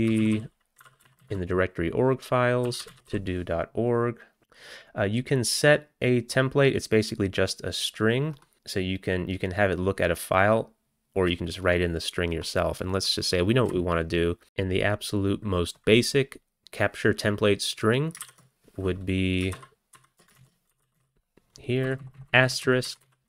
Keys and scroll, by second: 0.0-3.6 typing, 18.3 ctrl+y, 19.6 alt+b, 20.0 alt+b, 20.3 alt+d, 20.4-21.5 typing, 21.9 Left, 22.0 Left, 22.2 Left, 23.0 Left, 23.0 Right, 23.2 Right.